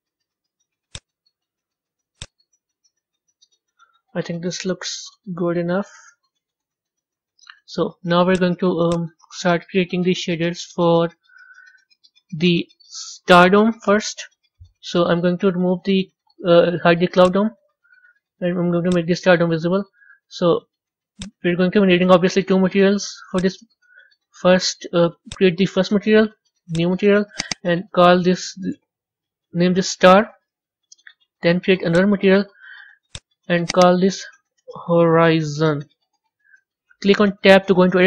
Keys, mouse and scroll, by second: 4.4 KP_1, 5.0-5.6 scroll up 4, 5.6-14.9 middle drag, 14.9 click, 17.1 click, 18.8 click, 19.6-20.5 scroll down 6, 20.6-21.1 middle drag, 21.1 drag, 25.3-25.7 drag, 26.8 drag, 27.3 click, 27.5-30.4 drag, 30.4 Left, 32.0-32.3 drag, 33.0 drag, 33.6 click, 33.8-37.5 drag, 37.5 b.